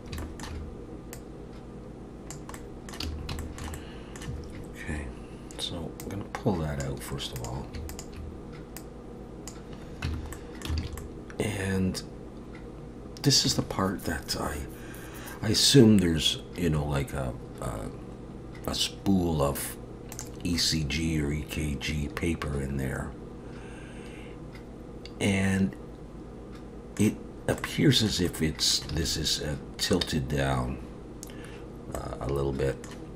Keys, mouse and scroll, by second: 0.2 shift+middle click, 1.1 click, 2.5 middle click, 3.0 a, 3.4 shift+middle click, 3.7 middle click, 6.0 click, 7.4 click, 7.9 shift+click, 8.8 click, 10.1 Tab, 10.3 middle click, 10.8 alt+a, 11.0 middle click, 20.1 click, 20.6 middle click, 27.6 middle click, 28.3 middle click, 28.9 alt+a, 32.0 middle click.